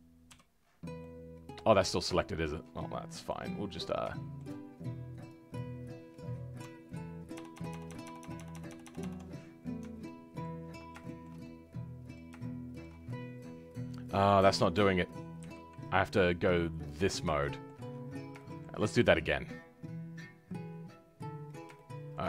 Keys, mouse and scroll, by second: 0.5-0.9 scroll down 2, 0.9 middle click, 1.8 scroll up 2, 2.1-5.5 shift+middle drag, 5.5 click, 7.3-8.3 ctrl+KP_Add, 10.0-15.4 ctrl+middle drag, 15.4 KP_3, 16.9 click, 17.3 shift+middle click, 17.8-18.3 scroll up 2, 18.3-21.1 shift+middle drag, 21.1 click, 21.5 scroll down 3, 21.7 shift+middle click.